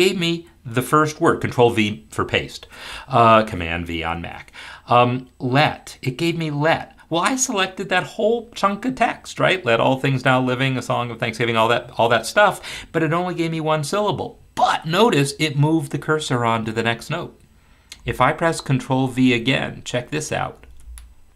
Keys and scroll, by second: 20.6 ctrl+v.